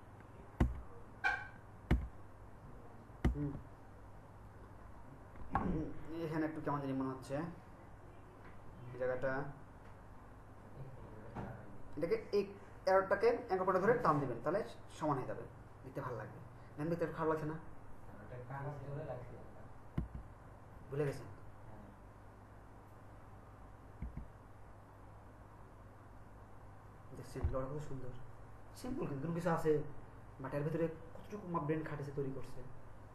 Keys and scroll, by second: 0.6 Right, 20.1 Right, 24.1 Right.